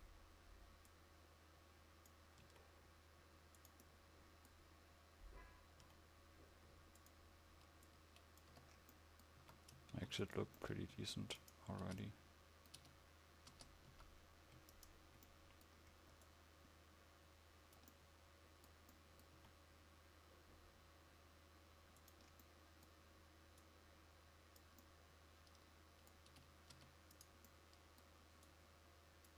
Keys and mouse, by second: 6.0 s, 8.7 Tab, 9.6 a, 10.0 ctrl+s, 12.0 Tab, 14.0 a, 17.5-22.5 drag, 25.0 click, 26.5 Tab, 26.9 Tab.